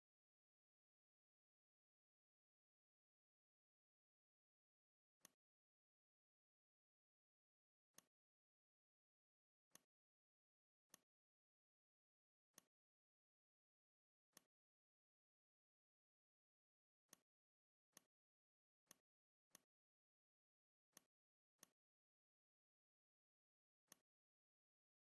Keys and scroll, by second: 2.2 v, 18.5 z, 19.3 space, 20.3 v, 23.5 r.